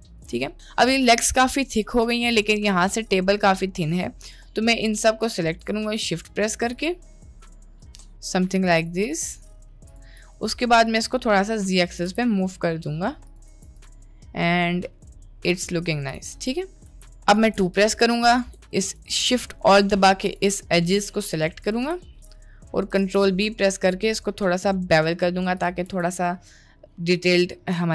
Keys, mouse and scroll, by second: 0.7 middle click, 1.1-2.3 middle drag, 2.5 middle click, 3.4 middle click, 4.4 middle click, 5.9 shift+click, 9.9 shift+click, 10.5 middle click, 11.5 click, 12.0 g, 13.5 Tab, 14.2-16.0 middle drag, 16.4 Tab, 16.6 middle click, 16.9 1, 17.3 2, 19.6 middle click, 20.8 middle click, 21.7 alt+shift+click, 22.1 middle click, 23.1 ctrl+b, 25.9 Tab, 26.3-26.9 middle drag, 27.5 shift+middle click.